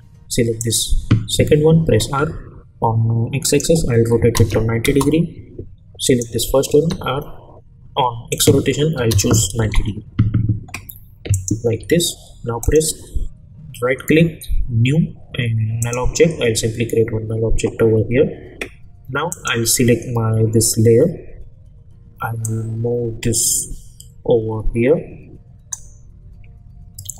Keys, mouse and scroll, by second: 0.6 click, 1.9 r, 3.4 click, 4.8 Return, 6.0 click, 6.7 r, 8.3 click, 9.6 Return, 11.3 click, 11.8 u, 12.6 right click, 15.8 click, 19.3 click, 22.4-25.9 drag.